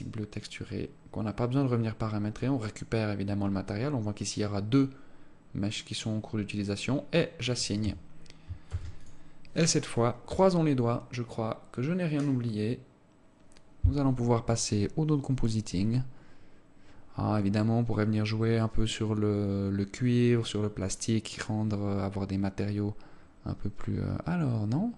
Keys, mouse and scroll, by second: 7.2 click, 8.2 Tab, 9.1 ctrl+s.